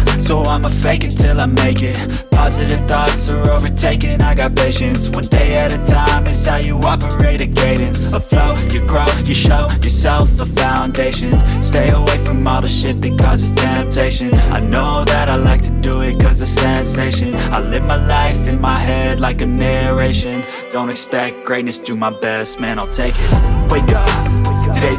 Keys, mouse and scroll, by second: 5.2-7.0 typing.